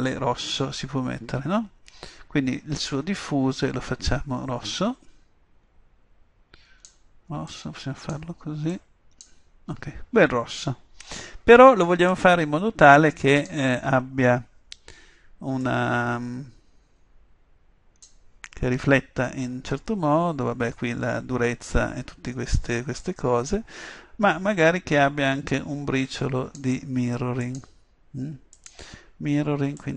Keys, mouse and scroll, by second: 2.9-4.6 drag, 12.1-13.9 drag, 15.7-17.5 drag, 23.1-24.9 drag, 27.5-29.9 drag.